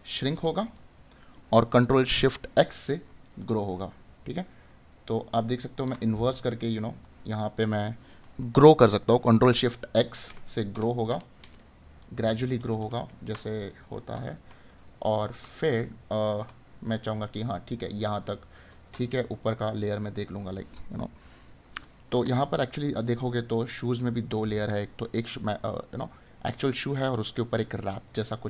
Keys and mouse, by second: 6.0 right click, 13.4 right click.